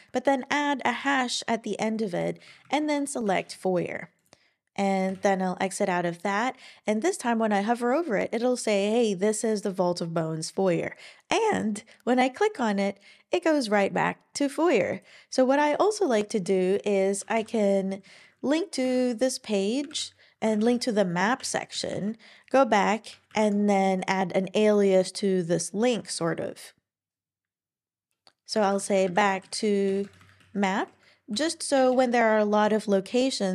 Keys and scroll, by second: 0.7-1.0 typing, 2.5 Down, 2.6 Down, 2.8 Down, 3.3 Return, 5.1 Escape, 19.9-21.1 typing, 21.4 Return, 21.7 Left, 21.9 Left, 23.3 shift+\, 28.4-30.4 typing, 30.8 super+Right, 31.3 Escape, 31.7 Return.